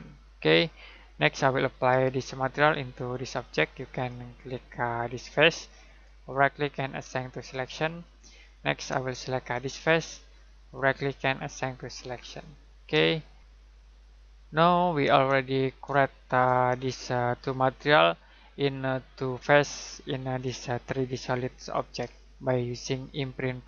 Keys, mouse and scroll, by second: 3.1 click, 4.9 ctrl+click, 6.2 right click, 7.3 click, 9.5 ctrl+click, 10.7 right click, 11.7 click, 13.1 middle click, 14.9 middle click, 15.8-16.3 scroll up 1, 16.9 middle click, 22.1 middle click.